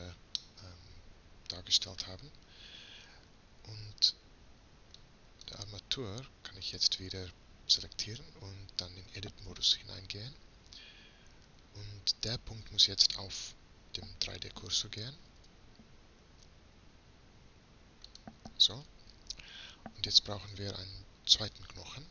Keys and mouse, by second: 0.4-8.7 drag, 8.7 middle click, 9.5 Tab, 15.3 shift+s, 18.8-22.1 middle drag.